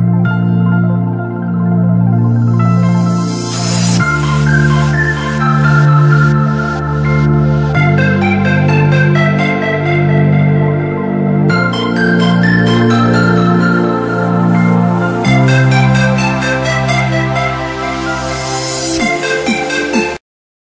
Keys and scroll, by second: 10.8 l, 12.6 F3, 17.0 shift+F2, 17.8 F9.